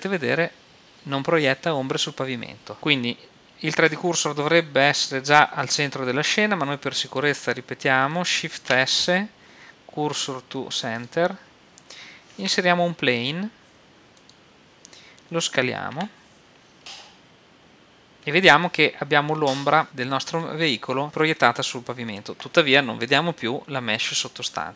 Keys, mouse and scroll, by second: 4.2-5.9 middle drag, 8.6 shift+s, 12.4 shift+a, 16.0 s, 18.1 click.